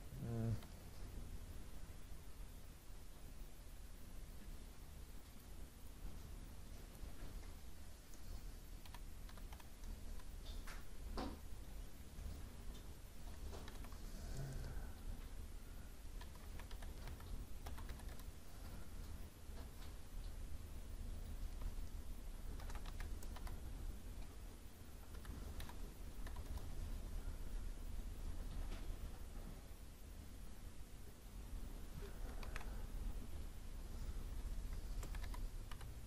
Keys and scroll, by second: 0.5 Escape, 10.0 Return, 18.1 Return, 26.4 Return, 32.4 ctrl+z.